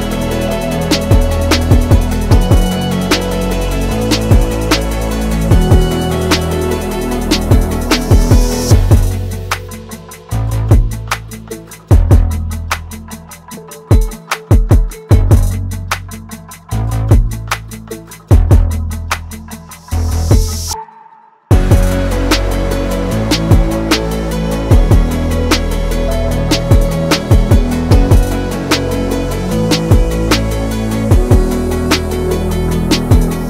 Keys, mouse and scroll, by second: 6.8 click, 10.8 click, 14.4 click, 17.1 click, 20.2-22.5 alt+shift+drag, 24.0-25.5 alt+drag, 25.5-28.4 alt+drag, 28.4-30.9 alt+drag, 30.9-33.4 alt+drag.